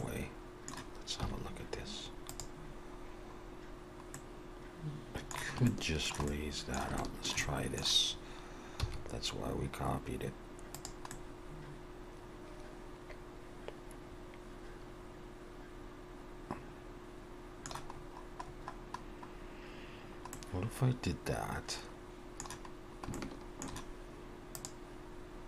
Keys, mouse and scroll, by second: 0.0 middle click, 1.2 z, 2.7 scroll down 2, 4.2 middle click, 4.2 scroll down 1, 5.7 shift+middle click, 6.3 middle click, 7.0 shift+middle click, 7.4 middle click, 8.8 e, 11.1 middle click, 18.0 scroll up 2, 18.5-19.4 scroll up 3, 19.9 scroll down 1, 20.3 middle click, 22.7 scroll down 1, 23.1 shift+middle click, 24.5 click.